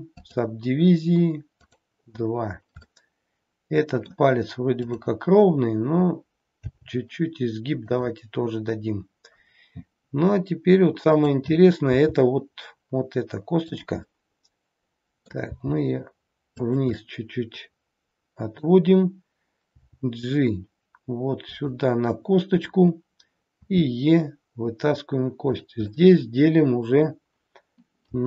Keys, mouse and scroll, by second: 1.6 click, 2.9 middle click, 4.8 click, 6.5 g, 9.4 scroll down 2, 11.0 click, 11.9 g, 14.0 middle click, 15.4 g, 17.0 middle click, 19.6 g, 25.9 middle click, 28.1 g.